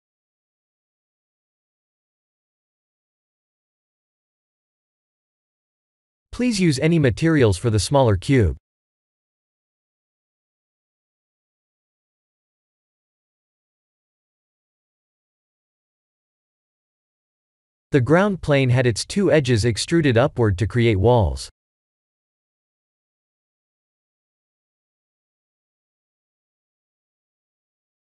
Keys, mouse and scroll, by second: 2.7 click, 3.6 click, 4.3-5.8 middle drag, 7.6 click, 15.6-17.0 middle drag, 17.5 click, 18.9-20.7 middle drag, 22.5-23.7 middle drag, 25.4 click, 26.3-27.1 middle drag.